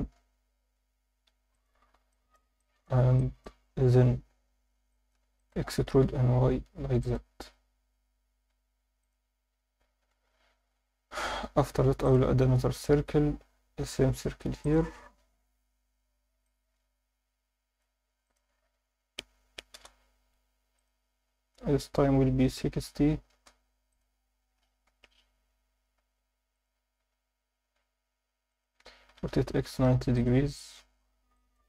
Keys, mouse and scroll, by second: 1.3 5, 1.5 click, 2.1 alt+shift+middle click, 2.6 ctrl+alt+middle click, 3.2 alt+shift+middle click, 4.9 alt+shift+middle click, 5.4 ctrl+alt+middle click, 5.7 e, 6.0 y, 7.0 click, 8.3 shift+s, 9.5 Tab, 10.0 shift+a, 14.6 click, 16.5-17.8 drag, 18.2-19.8 drag, 20.8-23.3 drag, 23.9 click, 24.8 scroll down 1, 24.8 KP_1, 26.0 s, 26.5 click, 27.0 s, 28.5 click, 29.1-30.6 typing, 30.1-30.6 drag, 31.3 alt+middle click.